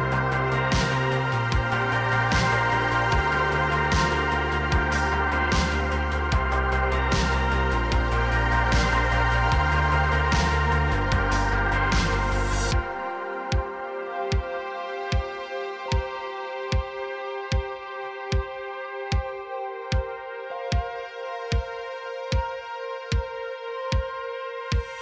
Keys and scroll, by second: 0.5 ctrl+KP_Add, 2.6 Tab, 3.3 ctrl+Tab, 3.8 r, 4.5 r, 4.7 r, 8.2 r, 8.3 r, 9.7 r, 9.9 r, 14.3 h, 21.3 ctrl+Tab.